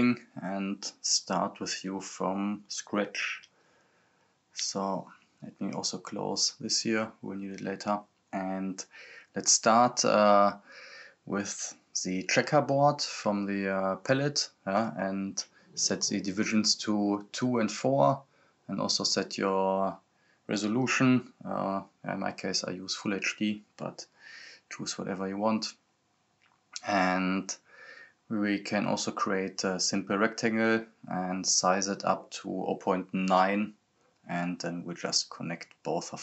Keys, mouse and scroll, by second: 0.3 click, 0.7-2.0 scroll down 1, 2.0-5.7 right drag, 5.7-11.7 drag, 12.1-13.2 scroll up 1, 13.4-16.2 drag, 19.1-22.5 drag, 23.8-25.0 typing, 25.9-32.3 drag, 34.0 right click, 34.4-35.3 typing, 36.0-36.2 drag.